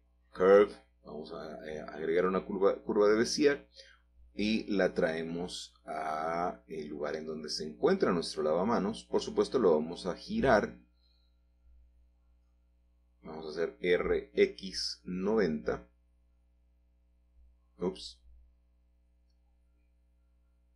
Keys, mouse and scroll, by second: 3.0 click, 4.9 g, 5.7 shift+z, 8.5 click, 9.7-10.3 scroll down 5, 9.9 middle click, 10.1 middle click, 10.3-11.9 middle drag, 14.5 r, 14.8 x, 15.8 9, 16.0 0, 18.1 Escape, 19.2-20.3 typing.